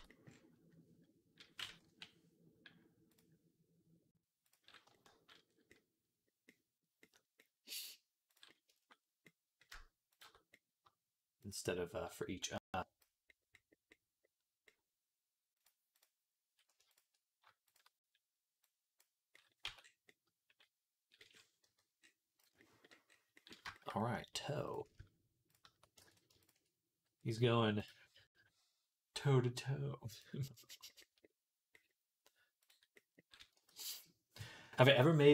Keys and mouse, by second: 1.7 /, 3.0-4.4 drag, 4.4-9.9 middle drag, 9.9 shift+click, 10.0-12.4 shift+middle drag, 12.4-15.5 drag, 15.5 middle click, 15.8 click, 15.8 middle click, 16.7 shift+click, 16.9 middle click, 17.5 shift+click, 17.6 shift+middle click, 18.5-22.3 drag, 19.5 Tab, 21.5 /, 22.3-25.3 middle drag, 25.3 shift+click, 25.6 ctrl+middle click, 25.9 ctrl+z, 26.3 click, 26.4-35.3 middle drag, 27.6-32.5 drag, 33.6 ctrl+s.